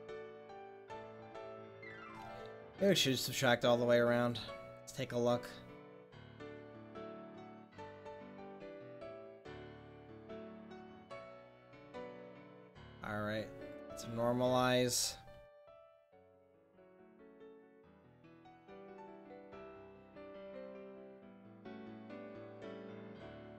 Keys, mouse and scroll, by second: 0.8-2.2 middle drag, 3.7-5.6 drag, 9.3-10.3 drag, 10.9 middle click, 11.7-12.8 drag, 13.9 click, 15.8 r, 22.1 r.